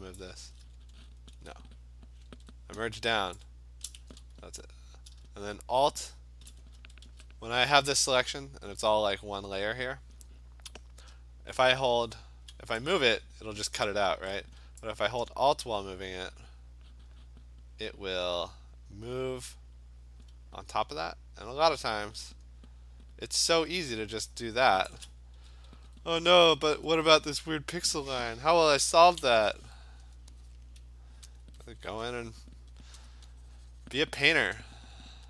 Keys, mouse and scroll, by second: 1.3 ctrl+z, 2.3 ctrl+e, 3.9 click, 4.1 ctrl+z, 6.5 alt+click, 7.1 ctrl+z, 13.8 click, 14.1 ctrl+z, 24.9 click, 25.7 ctrl+d, 26.3-27.0 scroll, 29.2 b, 29.5 click, 31.4 alt+click, 31.7 click, 31.9 click, 32.0 alt+click, 32.3 click, 32.7 alt+click, 32.8 alt+click, 33.1 click, 33.4 click, 33.9 click, 34.4 alt+click, 34.8 click.